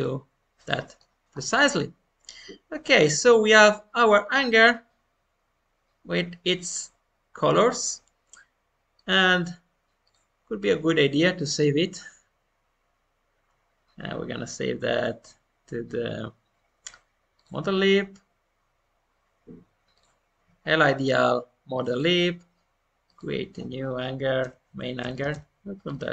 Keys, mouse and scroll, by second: 0.6 middle click, 1.0-1.3 scroll down 1, 1.3-2.7 middle drag, 2.7-3.0 scroll down 1, 3.0-10.0 middle drag, 10.0-26.1 drag.